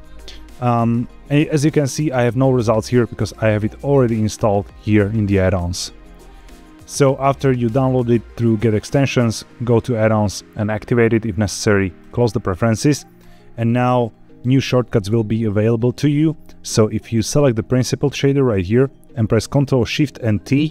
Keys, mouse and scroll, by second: 13.1 click, 17.0 click, 20.5 ctrl+shift+t.